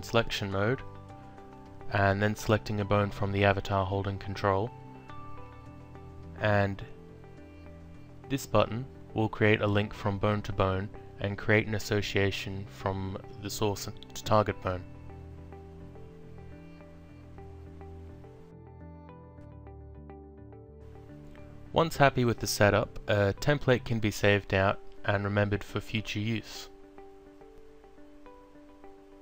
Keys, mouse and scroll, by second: 0.3 0, 2.3 click, 5.1 ctrl+click, 7.6 Down, 9.6 click, 13.0 alt+click, 14.6 click, 15.8 ctrl+click, 18.3 click, 19.9 alt+click, 20.6 alt+middle click, 22.7 click, 24.1 click, 26.1 click, 27.7 e, 28.1 t, 28.7 Return.